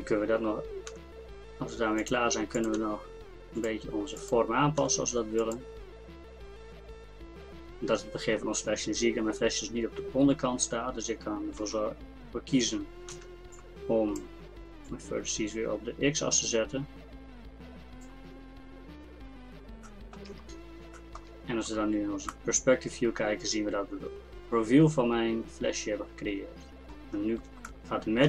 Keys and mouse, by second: 0.9 g, 2.8 g, 4.8 g, 11.6 a, 13.1 b, 14.9-16.6 drag, 18.5 middle click, 18.9 Tab, 27.1-28.2 middle drag.